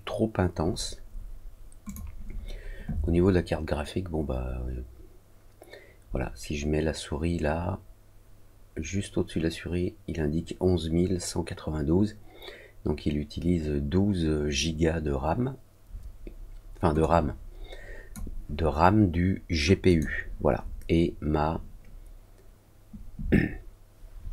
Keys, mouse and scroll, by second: 1.8 click, 19.8 click.